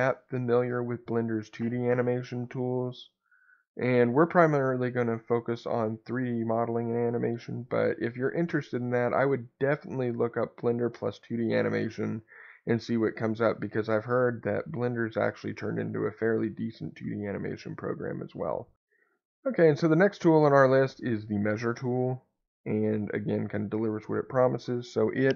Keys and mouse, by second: 23.7-25.3 drag.